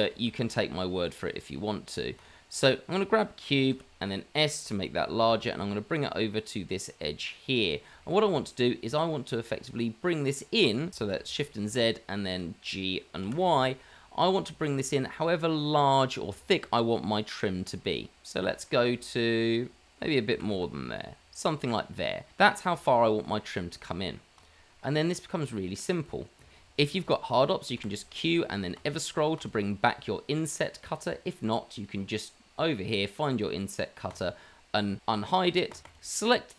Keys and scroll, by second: 0.6 shift+a, 3.7 s, 5.2 g, 11.3 shift+z, 13.2 g, 20.3 g, 23.2 shift+z, 27.7 q.